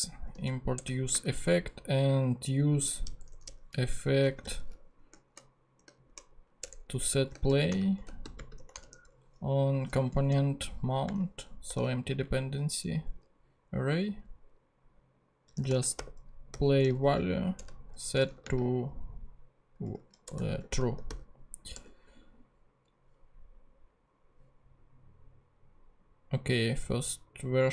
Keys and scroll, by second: 0.0-1.1 typing, 3.2 Return, 3.8 Up, 4.2-5.9 typing, 6.6 shift+Return, 7.2-9.1 typing, 9.8 Return, 10.1 Down, 10.3 Left, 10.8 ,, 11.7 [, 12.2 Up, 15.3-18.4 typing, 17.6 Return, 19.8-21.7 typing.